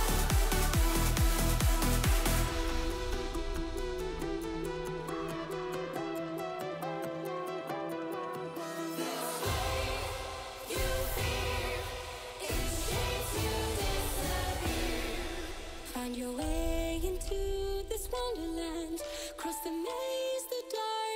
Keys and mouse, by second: 1.8 n, 1.9-4.5 alt+drag, 6.2 i, 11.0 i, 15.1 r, 19.8-20.6 drag, 20.6 ctrl+z.